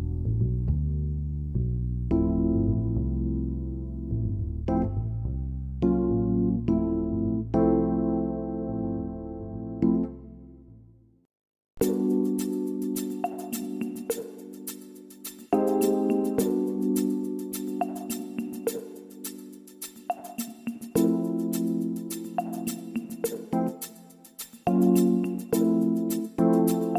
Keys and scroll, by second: 24.7 ctrl+z.